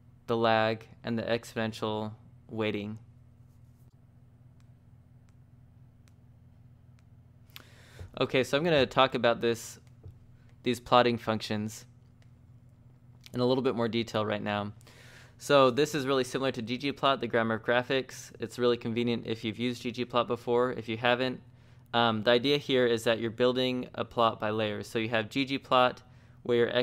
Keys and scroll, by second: 0.0-0.6 typing, 4.1-5.1 typing, 6.8 j, 7.0 j, 9.1 shift+v, 9.6 j, 11.6 z, 11.9 t, 20.9 j, 21.2 j.